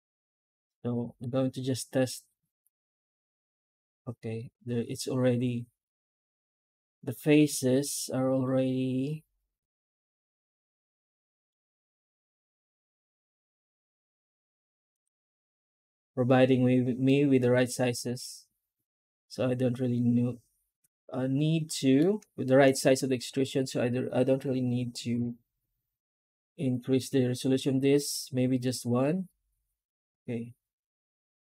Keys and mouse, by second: 16.9-21.8 middle drag, 22.3 shift+middle drag, 25.0 F9.